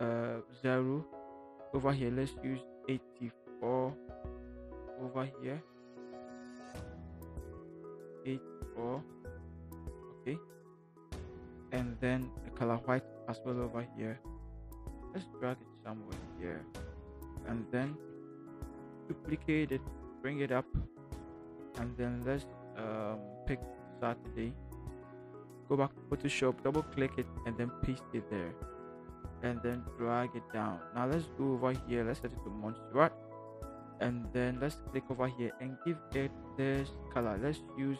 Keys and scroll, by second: 3.5 8, 4.3 Return, 8.1 8, 9.0 Return, 10.8 v, 14.8 v, 16.9 ctrl+t, 18.9 ctrl+j, 24.5 ctrl+c, 27.4 ctrl+v, 28.6 v.